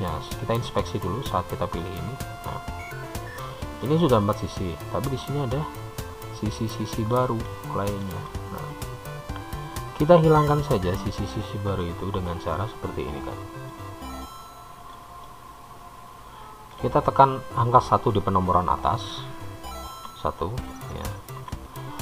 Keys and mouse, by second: 1.4 click, 4.0-5.3 middle drag, 7.5-8.7 shift+middle drag, 10.4-12.9 shift+middle drag, 14.2-17.2 middle drag, 20.5 1.